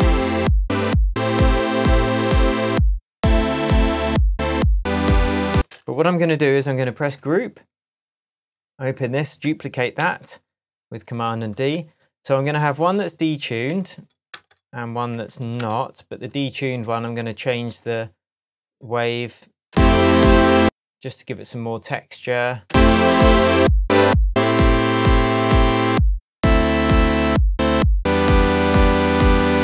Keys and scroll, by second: 5.5 space, 6.5 super+space, 7.0 super+g, 9.9 super+d, 13.6 0, 19.6 space, 22.6 space.